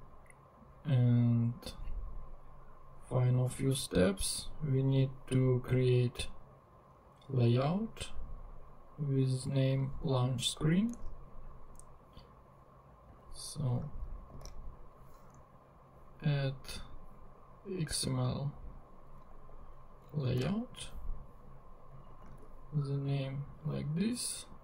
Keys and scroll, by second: 10.2 super+c, 11.0 super+Tab, 14.3 super+n, 19.3 Right, 20.4 Return, 22.2 super+v.